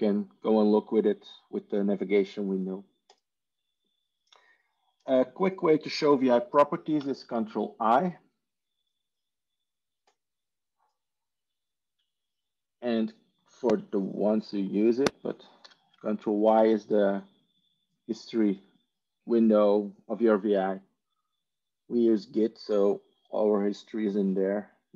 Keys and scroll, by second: 6.9 ctrl+i, 15.5 ctrl+y.